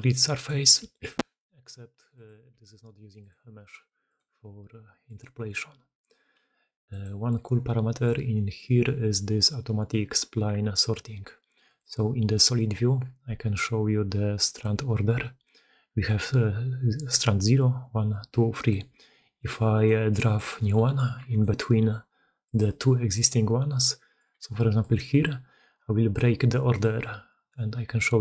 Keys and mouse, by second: 0.6 e, 2.6 g, 3.6 g, 4.4 g, 6.4 g, 7.5-7.9 drag, 8.2-8.5 drag, 11.5 click, 12.3 click, 14.3-19.7 drag, 19.7 middle drag, 20.2 shift+middle click, 20.5-21.1 shift+middle drag, 21.2-23.3 middle drag, 24.2-24.5 d, 24.7-26.1 middle drag, 24.7 d, 26.1 d, 26.6 middle drag.